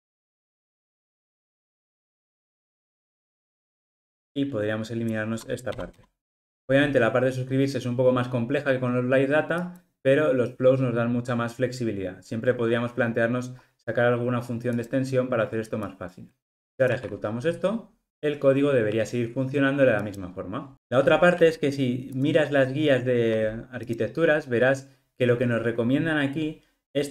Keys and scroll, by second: 1.0 super+v, 2.3 super+v, 2.7 ctrl+alt+o, 16.9 ctrl+r.